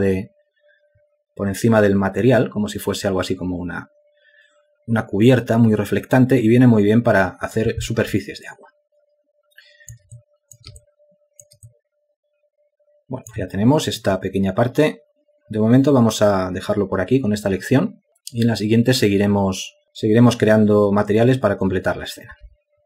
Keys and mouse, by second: 9.4 alt+click, 11.1 ctrl+alt+click, 11.8 alt+shift+click, 12.6 alt+click.